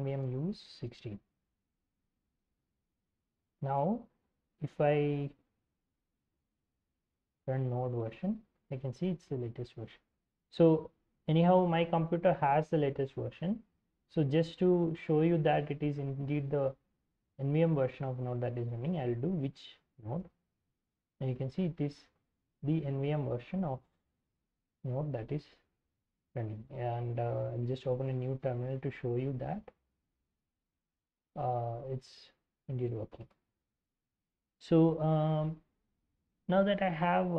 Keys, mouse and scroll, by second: 0.0-1.5 typing, 7.1-8.4 typing, 18.8-20.5 typing, 27.8 ctrl+n, 28.8-31.0 typing, 32.5-33.5 typing.